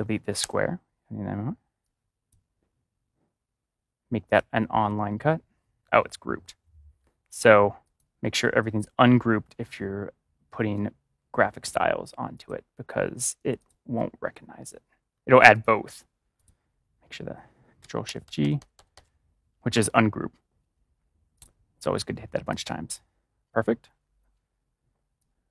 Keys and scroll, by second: 0.3 BackSpace, 18.0 ctrl+shift+g.